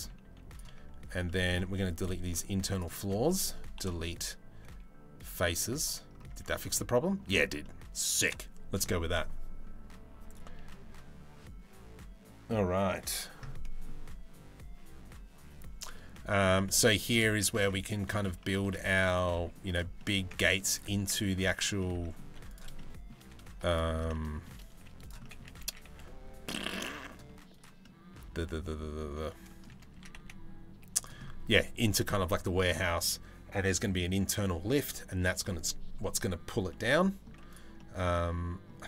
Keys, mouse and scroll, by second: 0.9 middle click, 1.3 3, 3.4 Delete, 5.1 z, 6.0 Tab, 6.1-6.8 middle drag, 7.2 middle click, 13.2 middle click, 15.7-16.0 middle drag, 16.3 shift+middle drag, 16.5 middle click, 17.2 Tab, 17.3 middle click, 18.3 Tab, 19.0 z, 19.6 middle click, 20.1 z, 20.9 Tab, 21.4 middle click, 21.9 3, 22.4 middle click, 23.7 middle click, 24.4 z, 24.9 middle click, 25.3 s, 27.4-29.3 middle drag, 29.6 s, 31.1 Tab, 36.3 middle click, 37.4 middle click.